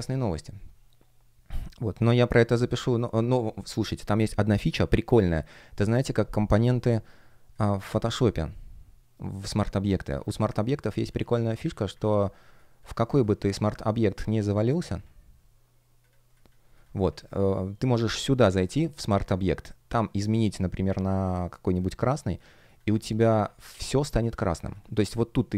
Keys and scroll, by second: 23.5 alt+super+c, 24.4 alt+super+m.